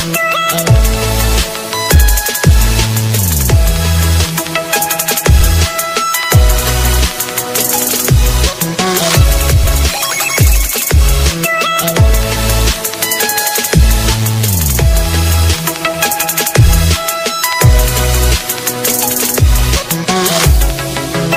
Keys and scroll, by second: 6.9 ctrl+space, 7.8 ctrl+alt+z.